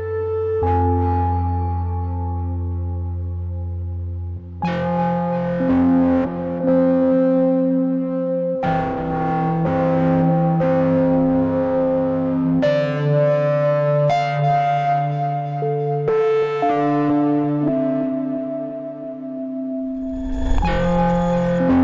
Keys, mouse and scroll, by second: 0.8-9.6 drag, 10.4 Delete, 10.8 click, 15.3 ctrl+shift+p, 16.3 click, 18.6 Down, 20.6 v, 20.8 click.